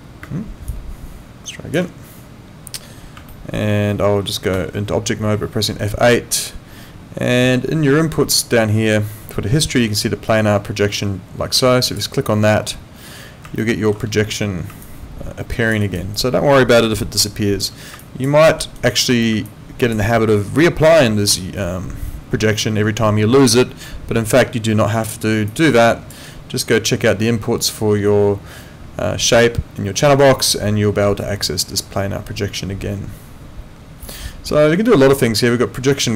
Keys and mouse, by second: 0.2 space, 0.7 click, 1.8 space, 3.3 middle click, 4.6 F8, 11.9 click, 13.6 alt+middle click, 14.9 alt+click, 15.8 alt+right click, 16.1 alt+click, 18.0 alt+click, 18.4 alt+middle click, 18.8 alt+right click, 19.5 alt+click, 25.5 click, 35.9 click.